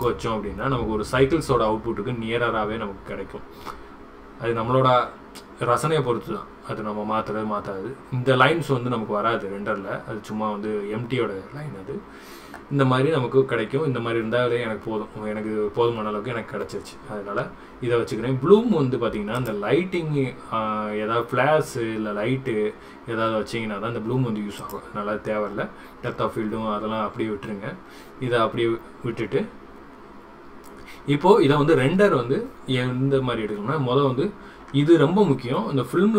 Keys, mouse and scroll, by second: 19.4 click, 24.6 click.